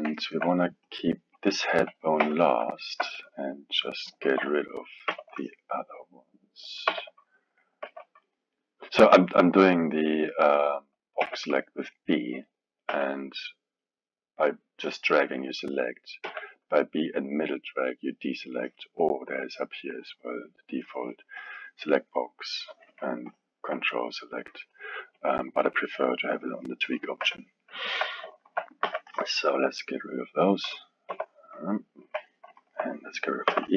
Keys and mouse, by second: 1.1 click, 2.2 KP_3, 2.7-4.2 alt+middle drag, 4.2 alt+a, 5.1 b, 6.9 b, 7.8 b, 9.3-11.2 middle drag, 11.2 b, 12.9 b, 16.2 b, 19.4-22.1 drag, 22.1-23.3 middle drag, 23.3 ctrl+click, 24.1-25.2 middle drag, 25.2-27.2 drag, 27.2 KP_3, 27.8 alt+middle click, 28.4 alt+a, 28.8 b, 31.1 x, 32.0 KP_1, 32.6 alt+middle click, 33.5 b.